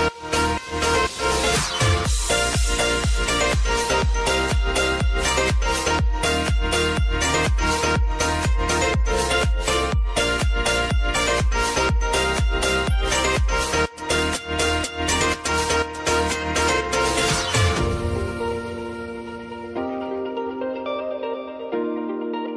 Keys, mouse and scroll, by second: 0.7 ctrl+d, 1.4-5.7 drag, 6.1 ctrl+d, 6.6-11.4 drag, 13.2 ctrl+d, 13.7-17.2 drag, 18.5 ctrl+d, 19.0-22.3 drag.